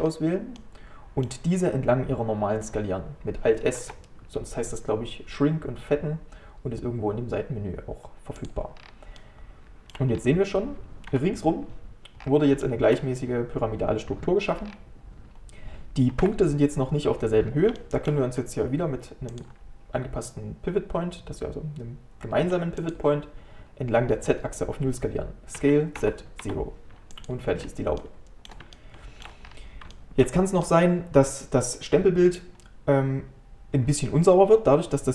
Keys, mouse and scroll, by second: 0.1-0.6 scroll down 1, 0.6-3.6 middle drag, 3.8 alt+s, 8.8 scroll down 3, 9.2 middle click, 10.2 scroll up 1, 11.1 KP_7, 12.2 scroll up 4, 12.7-14.6 shift+middle drag, 14.6 scroll down 3, 16.2 KP_1, 17.8-19.3 shift+middle drag, 19.3-27.6 drag, 27.6-28.0 scroll up 1, 28.0-29.5 middle drag, 29.5 scroll up 2, 29.9-33.8 shift+middle drag.